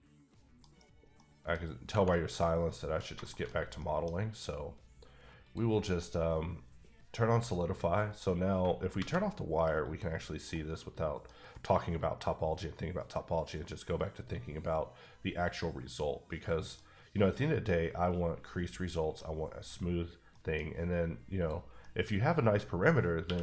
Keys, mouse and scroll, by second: 0.6 middle click, 1.5 middle click, 1.6 scroll up 1, 4.1 scroll up 1, 5.4 click, 6.0 middle click, 8.9 alt+v, 9.8 click, 10.2 scroll down 2, 10.4 scroll up 1, 10.4 middle click, 11.2 middle click, 11.3 scroll down 1, 11.5 middle click, 16.7 middle click, 16.8-17.6 scroll up 3, 18.9 middle click, 20.1 scroll down 1, 20.3 middle click, 21.4 click, 21.8 middle click, 22.2-23.0 scroll up 2, 23.2 q.